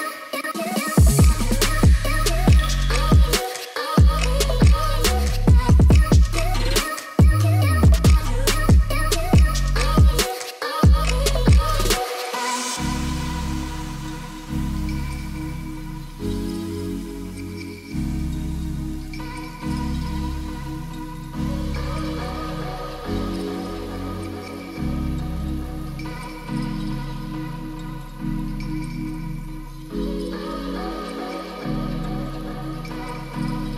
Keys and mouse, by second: 0.4 ctrl+z, 0.8 click, 2.9 middle click, 5.2-6.3 drag, 7.0 Tab, 8.1 click, 10.0 click, 10.4 click, 10.8 shift+middle click, 11.3 s, 12.1 click, 12.5 g, 15.2 r, 16.2 1, 16.3 8, 16.4 0, 17.7-19.7 typing, 20.5 Return, 22.3 g, 23.6 z, 25.4 x, 26.1 y, 29.4 ctrl+s, 29.6 Tab, 31.9 KP_0, 32.7 click, 33.5 shift+middle click.